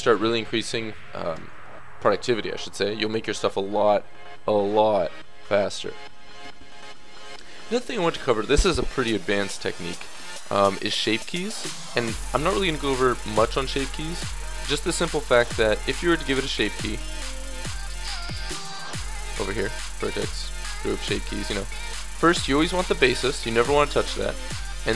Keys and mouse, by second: 0.5 KP_3, 0.7 KP_3, 2.0 KP_1, 7.3-13.2 middle drag, 15.2-20.3 drag, 22.1-24.9 drag.